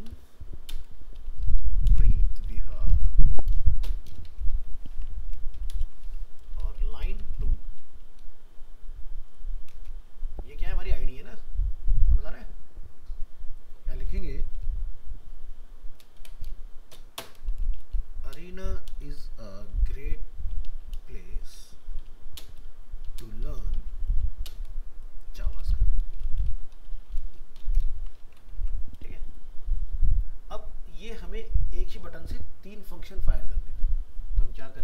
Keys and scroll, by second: 4.9 ctrl+c, 5.8 ctrl+Return, 6.5 ctrl+v, 28.0 ctrl+s, 28.3 ctrl+End, 28.5 ctrl+s.